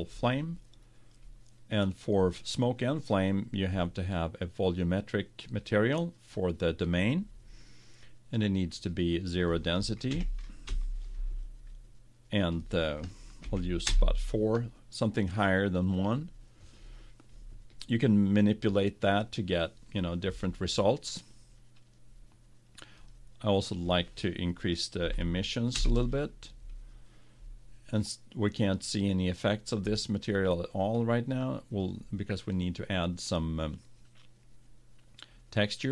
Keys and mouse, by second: 3.8-7.1 right drag, 8.8-10.4 right drag, 23.1-24.8 drag, 31.8-33.6 drag.